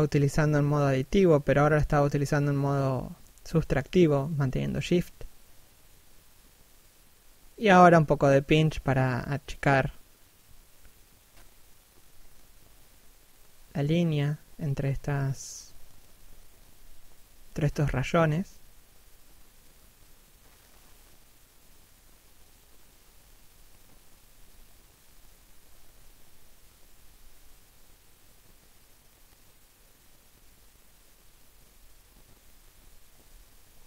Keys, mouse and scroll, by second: 0.0-0.3 scroll up 1, 0.3 p, 0.6-1.0 scroll up 1, 1.0 shift+middle click, 4.3 click, 6.1 click, 7.3 middle click, 8.1 f, 8.5 click, 9.9 click, 13.2 middle click, 14.9 f, 15.2 click, 17.2 click, 21.7-22.1 scroll down 1, 22.2 middle click, 24.1 scroll up 1, 24.4 click, 26.2 shift+middle click, 26.7 click, 27.8 click, 28.9 click, 29.1 scroll down 1, 29.5 shift+middle click, 31.6 scroll up 1, 32.0 click.